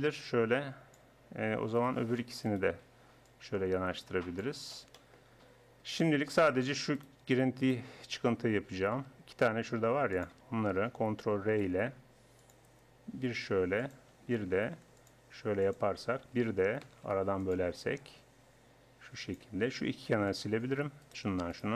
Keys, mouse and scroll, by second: 1.8-4.2 right drag, 3.3-5.2 drag, 5.2-7.0 middle drag, 7.0-8.8 right drag, 8.8 g, 11.5 ctrl+r, 14.7 ctrl+r, 16.9 ctrl+r, 20.3 click, 21.0-21.7 middle drag.